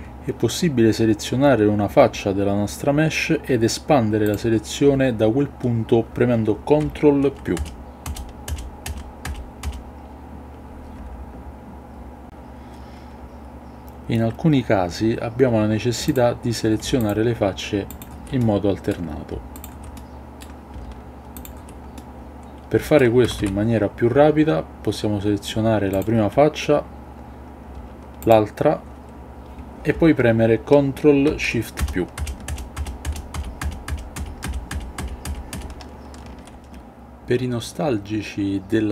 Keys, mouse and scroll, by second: 7.5 ctrl+KP_Add, 8.0 ctrl+KP_Add, 8.4 ctrl+KP_Add, 8.8 ctrl+KP_Add, 9.2 ctrl+KP_Add, 9.6 ctrl+KP_Add, 12.2 a, 16.0 click, 17.8 shift+click, 18.3-18.9 middle drag, 19.5 shift+click, 19.9-20.3 middle drag, 21.3 shift+click, 22.0-23.0 middle drag, 23.2 a, 23.3 a, 25.9 click, 31.7 ctrl+shift+KP_Add, 32.1 ctrl+shift+KP_Add, 32.4 ctrl+shift+KP_Add, 32.7 ctrl+shift+KP_Add, 33.0 ctrl+shift+KP_Add, 33.3 ctrl+shift+KP_Add, 33.5 ctrl+shift+KP_Add, 33.9 ctrl+shift+KP_Add, 34.1 ctrl+shift+KP_Add, 34.4 ctrl+shift+KP_Add, 34.7 ctrl+shift+KP_Add, 34.9 ctrl+shift+KP_Add, 35.2 ctrl+shift+KP_Add, 35.5 ctrl+shift+KP_Add.